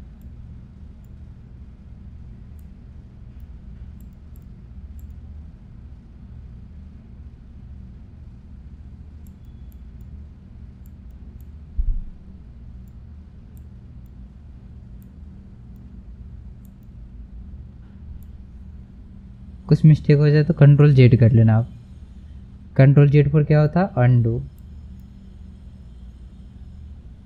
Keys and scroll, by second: 21.2 ctrl+z.